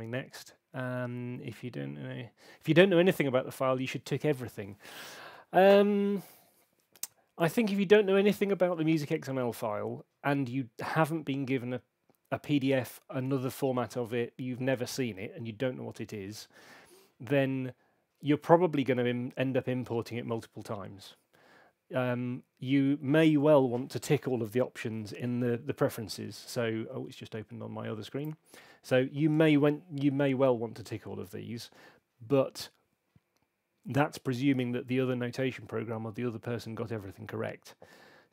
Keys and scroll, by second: 25.0 super+,.